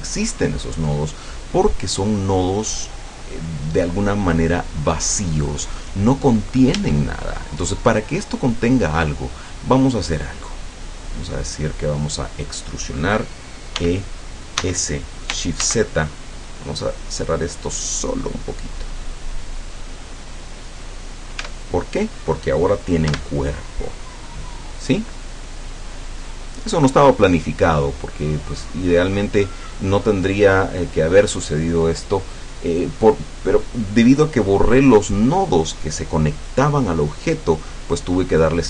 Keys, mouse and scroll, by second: 6.8 Tab, 10.2 scroll down 2, 10.7-12.2 middle drag, 12.2-12.5 scroll up 2, 13.8 e, 14.7 s, 15.7 shift+z, 20.2 click, 21.5 Tab, 23.1 F12.